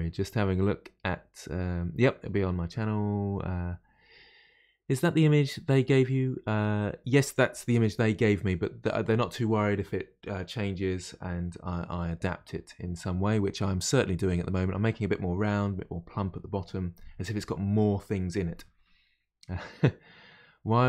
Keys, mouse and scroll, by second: 13.8-16.8 middle drag.